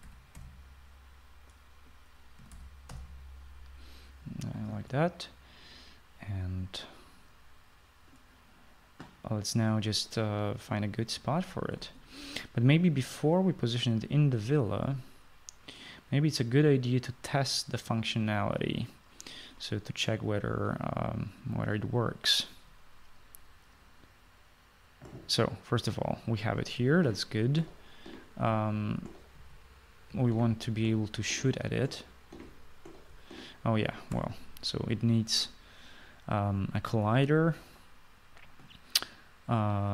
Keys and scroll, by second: 0.9-1.3 typing, 3.4-3.9 typing, 27.7-33.3 typing, 35.1 Escape.